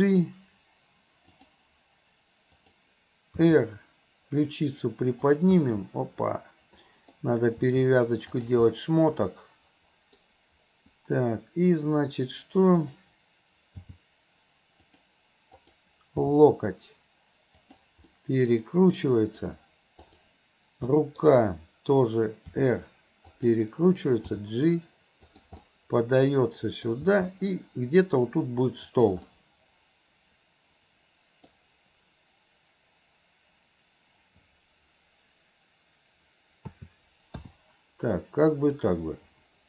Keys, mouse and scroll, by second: 2.7 click, 3.4 r, 5.7-7.2 middle drag, 7.2-7.7 scroll down 1, 7.7 r, 8.7-9.3 scroll up 1, 9.3-10.2 scroll up 1, 10.2 middle click, 12.8 click, 13.8 g, 15.6 click, 16.3 g, 18.1-19.5 middle drag, 21.0 middle drag, 22.6 r, 24.4 g, 25.6 scroll up 1, 25.8-26.9 middle drag, 27.1 g, 29.3-30.1 scroll up 1, 30.1-31.6 middle drag, 36.8 a, 37.5 i, 38.9-39.6 drag.